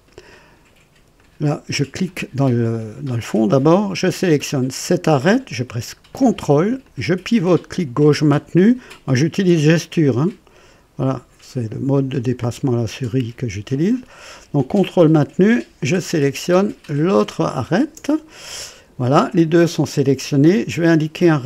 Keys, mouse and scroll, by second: 1.1 click, 4.8 click, 6.8-8.8 ctrl+drag, 12.4 ctrl+right click, 14.7 ctrl+click, 17.1 ctrl+click, 20.7 click.